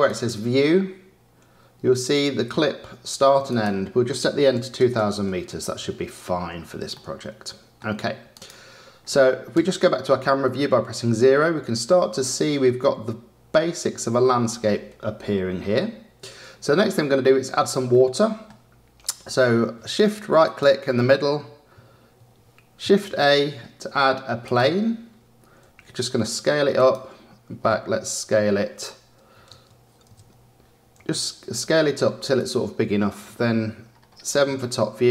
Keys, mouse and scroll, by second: 0.0 click, 3.4-4.9 drag, 4.9 KP_0, 6.9-8.3 middle drag, 8.3 click, 9.5 KP_0, 16.8-20.4 middle drag, 20.4 shift+right click, 22.8 shift+a, 25.6 s, 28.2 s, 30.9 s, 34.6-35.1 shift+middle drag.